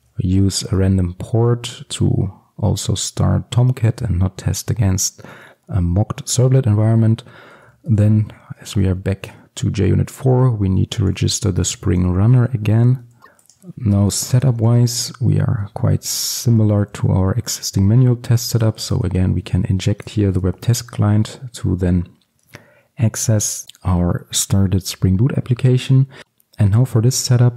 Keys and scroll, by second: 10.4 Return, 16.0 Return.